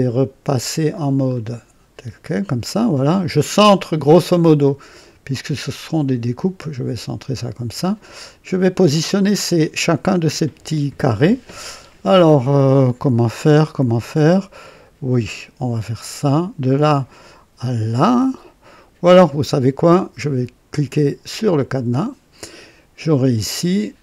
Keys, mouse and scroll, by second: 1.3 click, 4.1-8.9 drag, 16.1 click, 21.5 click, 23.3 click.